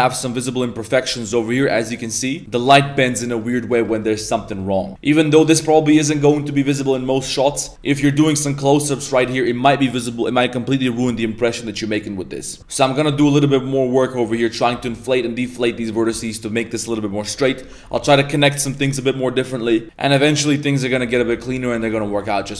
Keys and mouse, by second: 1.9 middle click, 2.9 middle click, 3.7 middle click, 4.0 middle click, 4.2 Tab, 4.4 middle click, 4.6 1, 4.9 Tab, 4.9-5.5 middle drag, 6.2 shift+middle click, 6.4-6.9 middle drag, 7.2 middle drag, 7.8 a, 7.9 a, 8.0 middle drag, 8.5-8.8 middle drag, 8.9 shift+middle click, 12.6 Tab, 13.1 alt+s, 14.7 Tab, 15.2 middle click, 15.6 middle click, 16.2 middle click, 17.3 middle click, 17.7 Tab, 18.7 middle click, 19.8-21.1 middle drag, 19.8 z, 21.4 middle click, 21.8 shift+middle click, 22.1 middle drag.